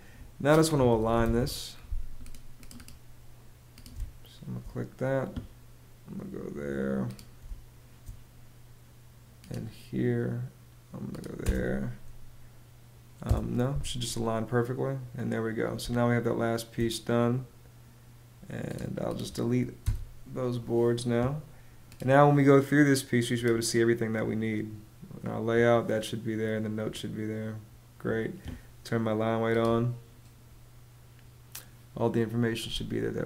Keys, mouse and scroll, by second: 0.0-1.3 typing, 3.4 space, 6.9 space, 10.9 space, 12.7 Return, 15.3 space, 19.3 BackSpace, 32.2 space.